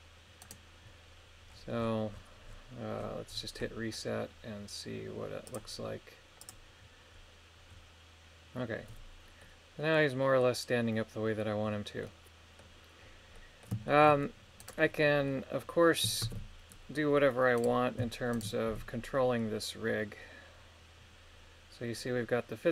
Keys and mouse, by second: 0.4 right click, 5.4 click, 6.4 click, 9.4-10.4 middle drag, 12.0 middle click, 13.3 middle click, 13.9 shift+middle click, 14.6 right click, 15.3 middle click, 16.3 ctrl+Tab, 18.3 shift+right click, 18.6 r.